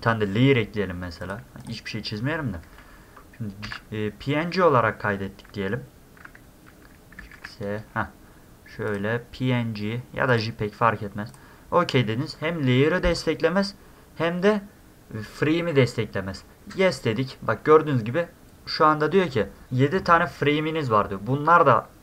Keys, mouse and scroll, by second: 1.2 click, 1.6 click, 3.6 ctrl+s, 7.2 ctrl+shift+s, 8.9 click, 10.3 click, 11.3 click.